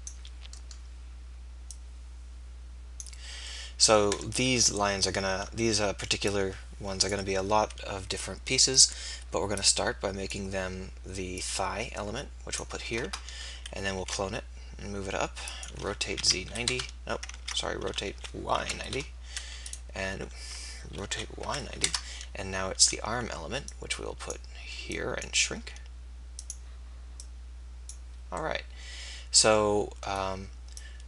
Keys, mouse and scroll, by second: 4.4 KP_3, 7.6 s, 14.0 shift+d, 15.8 r, 17.4 ctrl+z, 17.9 r, 21.1 r, 23.6 click, 25.7 s, 27.3-29.2 drag, 30.8-31.0 drag.